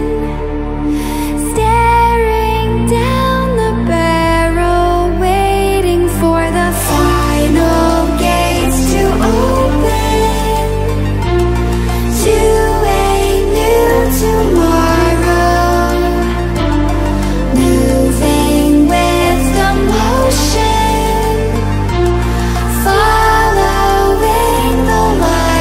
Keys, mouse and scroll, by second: 2.1 space, 2.3 click, 2.6-3.3 space, 5.6-11.0 drag, 13.0 click, 16.0 space, 16.6 ctrl+alt+scroll down 1, 17.2 ctrl+alt+scroll up 1, 18.3-19.2 drag.